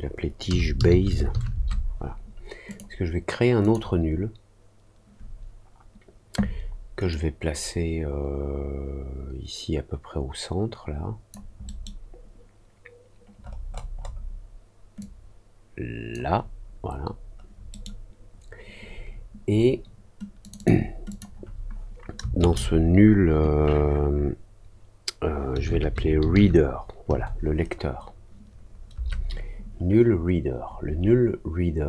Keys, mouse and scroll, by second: 2.6 click, 3.5 click, 7.0-11.2 drag, 11.6 middle click, 13.3 middle click, 13.6 middle click, 13.9 middle click, 14.9-16.1 drag, 17.6 middle click, 20.4 click, 20.5 click, 21.0 click.